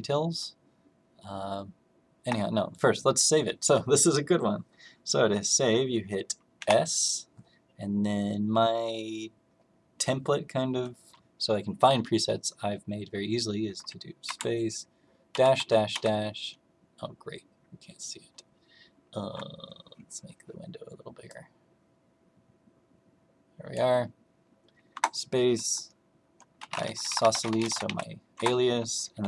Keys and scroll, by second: 6.5 s, 14.2 space, 15.2 -, 15.5 -, 15.8 -, 24.8 space, 26.4-29.2 typing.